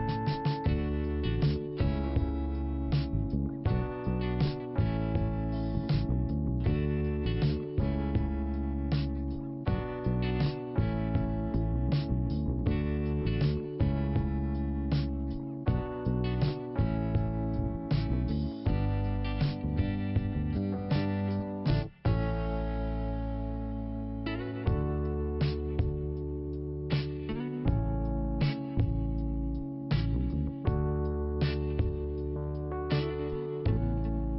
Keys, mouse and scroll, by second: 0.7 click, 0.8 click, 2.1 scroll down 1, 3.2 scroll down 1, 3.7 click, 4.2 scroll down 1, 4.6 click, 5.1 scroll down 2, 29.0 ;, 30.3 click, 31.9 click, 33.0 right click, 33.8 click.